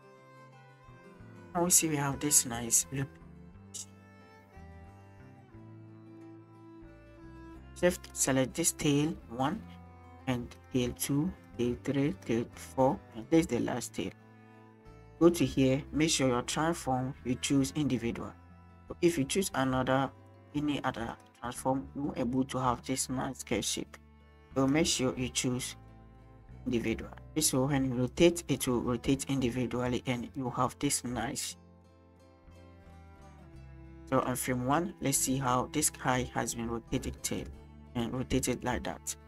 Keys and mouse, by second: 2.0 shift+drag, 2.1 shift+middle click, 8.1 click, 8.7 click, 10.6 shift+click, 10.9 shift+middle click, 11.4-12.2 shift+drag, 13.1 shift+click, 15.3-21.2 drag, 26.0-26.8 drag, 28.1 click, 32.3-33.4 drag, 34.2 shift+middle click, 35.1 middle drag, 36.0-37.4 middle drag, 38.0 click.